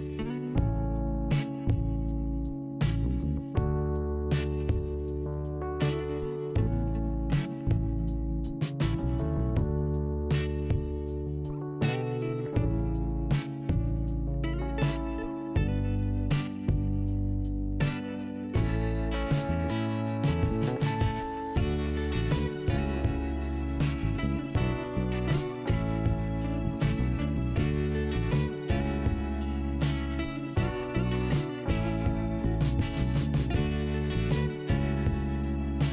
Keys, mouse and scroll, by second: 0.4 scroll up 1, 1.3 click, 2.7 scroll down 1, 4.4 click, 6.4 click, 8.7 click, 9.3 click, 9.6 click, 12.1 p, 13.1 click, 17.2 click, 20.0 click, 20.1 click, 20.4 click, 20.5 double click, 20.7 double click, 21.3 click, 21.5 click, 21.5 click, 21.6 double click, 21.7 double click, 21.8 double click, 21.9 double click, 22.0 double click, 22.1 double click, 22.2 double click, 23.5 click, 25.4-25.8 scroll up 1, 26.1 click, 26.1 click, 27.3 click, 27.4 click, 27.8 click, 29.3 click, 29.5 click, 30.5 click, 34.2-34.7 scroll down 1, 34.7 click, 34.8 click, 35.5 click.